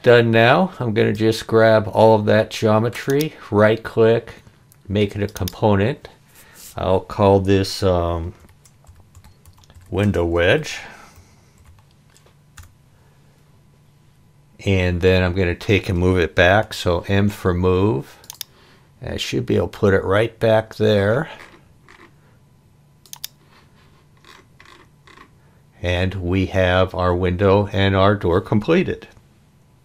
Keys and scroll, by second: 8.2-12.1 typing, 12.6 Return, 16.6 m.